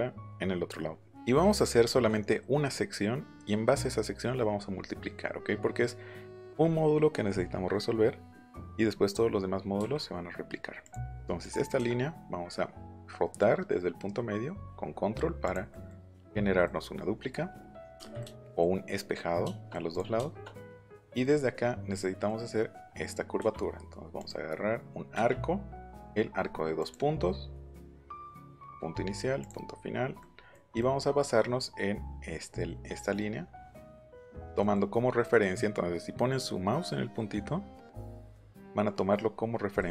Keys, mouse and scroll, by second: 5.4-6.4 middle drag, 7.8 middle click, 10.8 click, 11.4 click, 15.4 click, 15.7 middle click, 16.6 middle click, 17.9 space, 19.1 middle click, 19.9 click, 20.1 shift+middle click, 20.7 middle click, 21.9-22.4 scroll up 4, 23.3 a, 24.1 click, 26.7 click, 28.0 click, 29.4 click, 30.2 middle click, 30.8 middle click, 34.6 middle click, 34.9 middle click, 39.8 middle click.